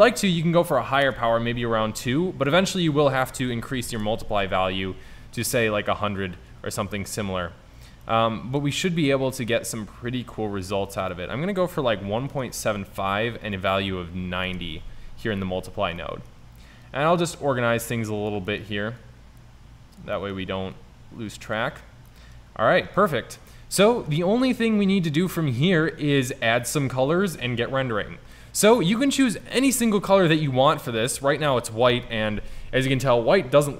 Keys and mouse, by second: 2.8-3.9 drag, 3.9 KP_0, 11.0-12.4 drag, 19.1-20.0 drag, 20.8 click, 28.4-29.6 drag, 32.0 KP_0.